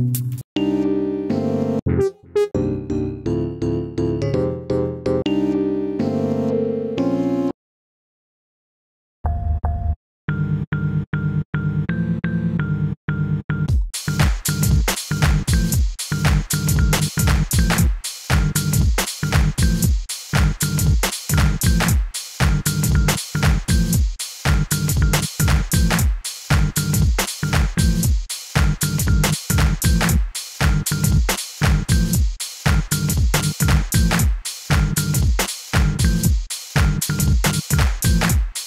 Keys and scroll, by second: 9.2-10.7 typing, 13.6 space, 14.0 a, 17.5 s, 19.5 s, 38.0 s.